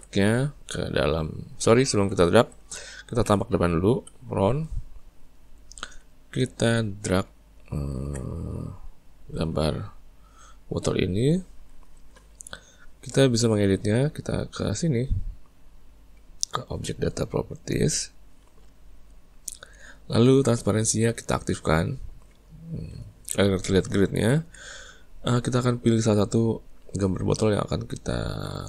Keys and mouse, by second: 1.9 ctrl+z, 9.8 click, 10.9 click, 17.8 click, 21.6 click, 24.1-26.6 ctrl+middle drag, 26.6 click.